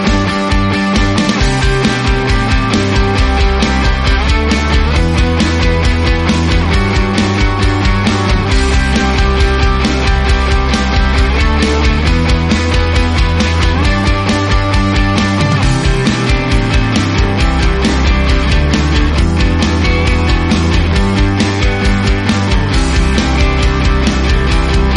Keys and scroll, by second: 3.0 ctrl+z, 3.5 ctrl+f, 8.1 space, 11.1-11.5 typing, 11.5 Return, 11.7 Tab, 12.6 2, 14.5 Tab, 18.2 space, 19.0 space, 19.3 shift+a, 20.6-21.3 typing, 24.4 space.